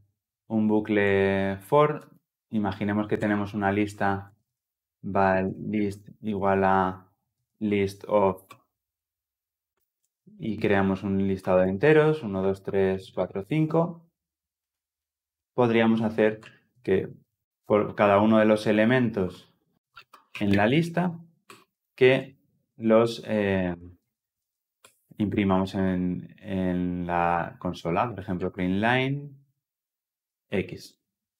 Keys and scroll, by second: 8.4 Return, 11.7 Return, 28.8 Return.